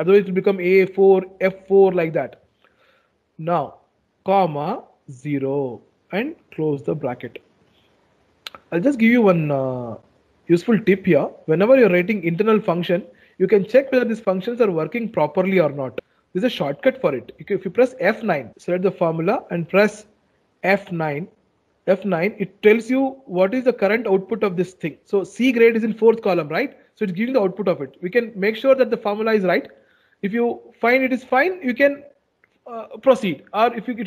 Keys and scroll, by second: 18.2 F9.